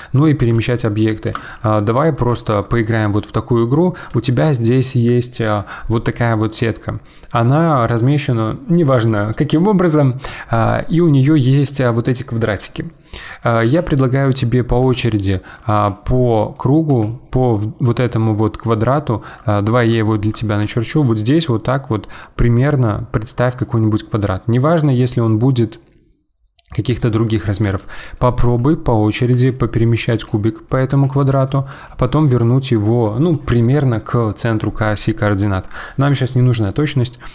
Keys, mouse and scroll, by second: 0.3 g, 1.0-2.2 middle drag, 2.2 g, 2.8-3.2 middle drag, 3.2-3.7 scroll down 1, 3.7-9.5 middle drag, 13.6 g, 14.8 g, 16.8 g, 17.8-19.3 middle drag, 19.3-20.0 scroll down 1, 20.0-20.6 shift+middle drag, 20.6 d, 20.7-23.4 drag, 23.4 d, 23.5 d, 23.5 d, 23.6-27.0 right drag, 27.0 d, 27.6 g, 28.4 g, 30.1 g, 30.9 g, 32.4 g.